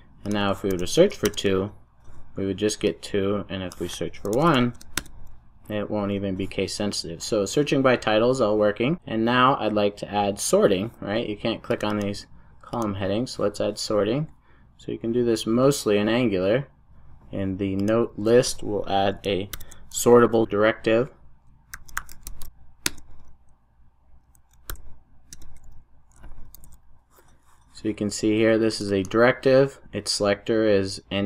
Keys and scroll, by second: 19.8 super+n, 24.7 super+j, 25.3 Return, 26.6 super+s.